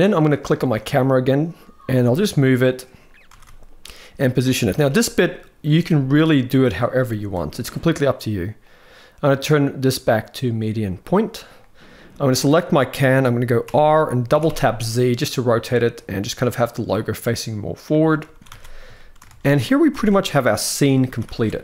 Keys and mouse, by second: 1.7 g, 3.0 r, 4.6 g, 5.6 g, 8.4-11.0 drag, 12.0 click, 13.4 r, 18.1 ctrl+s, 18.3 ctrl+s, 18.7 shift+middle click, 19.0 alt+a, 19.7 ctrl+b, 20.9 ctrl+s, 21.1 ctrl+s, 21.2 ctrl+s.